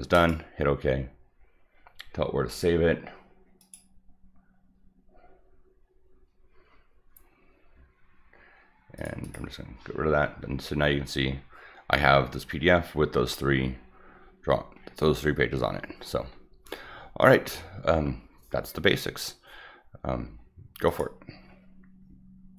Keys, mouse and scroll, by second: 0.1 click, 3.6 click, 9.0 click, 9.2 click, 10.3 middle click, 12.2-12.5 scroll up 2, 12.5-13.0 scroll down 4, 13.4-13.9 scroll up 6, 14.1-14.5 scroll down 4, 14.8-15.1 scroll up 2, 15.1 scroll down 1, 15.8 scroll down 1, 16.2 scroll up 1, 20.9 click.